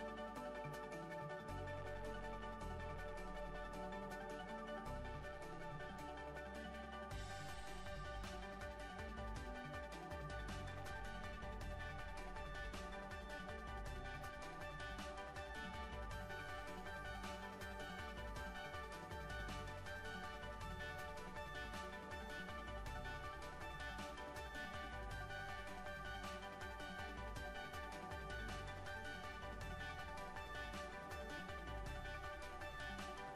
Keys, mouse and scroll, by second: 0.3-1.5 right drag, 1.4 click, 1.9 Tab, 2.4 Tab, 3.5 middle click, 4.4 Tab, 4.7-7.3 middle drag, 7.4 middle click, 8.4 KP_3, 8.4 middle click, 8.6 middle click, 8.8 KP_1, 9.7 e, 12.9 e, 14.4 r, 15.6 e, 16.4 r, 16.9 click, 17.5 r, 18.1 e, 18.6 r, 19.1 click, 19.8 e, 20.8 click, 21.3 middle click, 22.9 middle click, 24.4 e, 26.3 middle click, 26.8 r, 27.5 middle click, 28.4 click, 28.8-29.9 middle drag, 30.0 middle click, 30.3-31.3 middle drag, 32.5 ctrl+z, 32.6 ctrl+z, 32.7-33.3 ctrl+z.